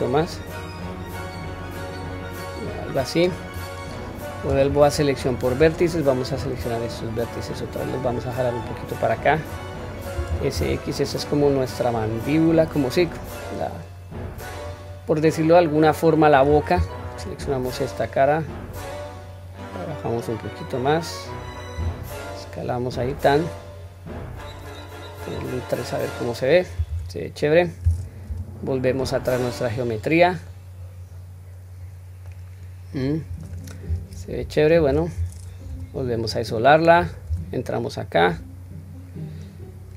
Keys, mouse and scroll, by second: 3.0 middle click, 4.6 1, 5.1 click, 6.2 shift+click, 7.4-9.5 drag, 10.3 s, 14.6-16.3 middle drag, 16.7 3, 17.0 click, 18.7 click, 19.2-21.4 drag, 21.7 s, 25.2 click, 25.9-26.6 middle drag, 26.9 Tab, 28.2 /, 29.1-29.7 scroll down 1, 29.7-30.5 middle drag, 30.8 scroll down 1, 31.9 scroll down 1, 32.2-33.4 middle drag, 33.9 q, 34.9 q, 35.7 /, 36.3-37.1 middle drag, 37.3 Tab, 37.8-38.6 scroll down 1, 38.7-39.4 scroll up 1.